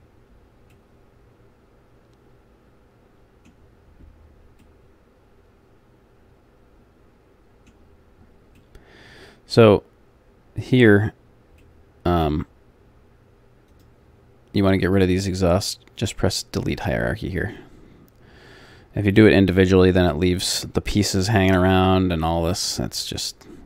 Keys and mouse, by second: 0.0 click, 0.7 middle click, 5.9 middle click, 8.2 middle click, 8.8-9.9 middle drag, 10.6-11.8 middle drag, 13.7-22.2 drag, 14.8-22.2 right drag, 23.2-23.6 middle drag.